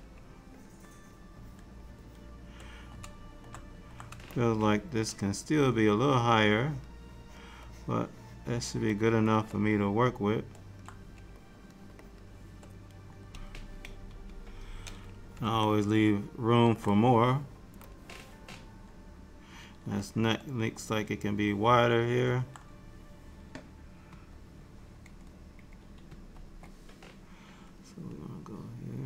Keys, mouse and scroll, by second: 0.7 shift+click, 1.0 shift+click, 2.6 shift+click, 4.4 shift+click, 5.2 shift+click, 6.2 shift+click, 6.9 shift+click, 7.3 shift+click, 7.7 shift+click, 8.4 shift+click, 9.5 shift+click, 9.8 middle click, 11.5 shift+click, 12.1 shift+click, 14.1 KP_1, 15.7 shift+middle click, 18.0 click, 20.1 alt+middle click, 24.1 KP_1, 26.1 ctrl+KP_1.